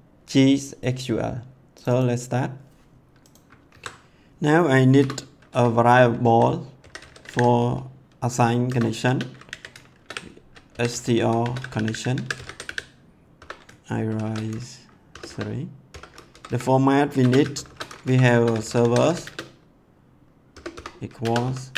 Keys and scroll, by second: 3.6 ctrl+s, 4.9 Return, 6.2-7.8 typing, 8.6 Return, 9.1-14.0 typing, 15.1 BackSpace, 15.9 ;, 16.3 Left, 17.2-19.4 typing, 18.0 Left, 20.5-21.7 typing.